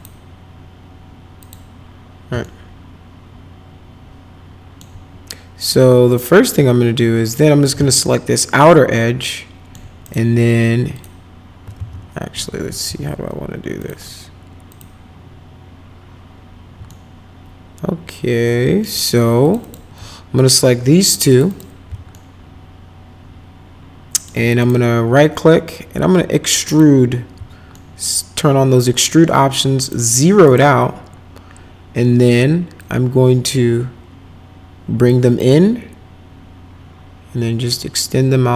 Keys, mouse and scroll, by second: 1.4 click, 2.4-4.8 alt+middle drag, 6.1 click, 7.2 shift+click, 7.9-9.7 alt+middle drag, 10.0 right click, 10.9 click, 11.7 ctrl+z, 12.8 2, 13.8 click, 14.7 click, 16.9-18.8 alt+middle drag, 19.4 click, 19.6 click, 21.3 ctrl+click, 21.5 ctrl+click, 22.1-24.2 alt+middle drag, 24.6 right click, 26.6 click, 27.7-28.8 alt+middle drag, 29.8 right click, 30.4 right click, 32.8-35.0 drag, 35.4-38.5 drag.